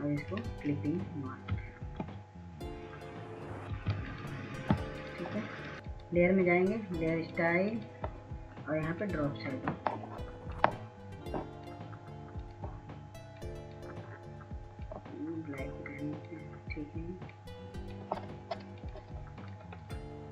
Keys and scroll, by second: 3.4 ctrl+s, 3.6 ctrl+s, 4.2 ctrl+s, 4.7 ctrl+s, 5.3 ctrl+s.